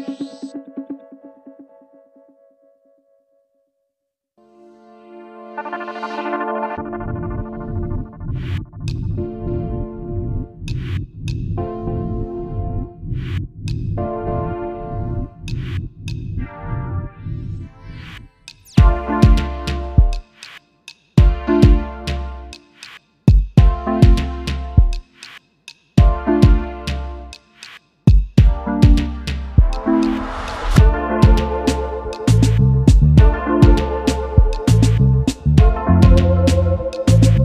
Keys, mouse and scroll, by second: 12.8 right click, 13.8 ctrl+z, 16.7 ctrl+z, 17.7 ctrl+z, 19.5 ctrl+z, 21.6 ctrl+z, 23.1 ctrl+z, 23.9 right click, 24.8 ctrl+z, 26.0 ctrl+z, 27.7 ctrl+z, 30.8 right click, 31.7 ctrl+z, 32.7 ctrl+z, 33.9 ctrl+z, 37.1 right click.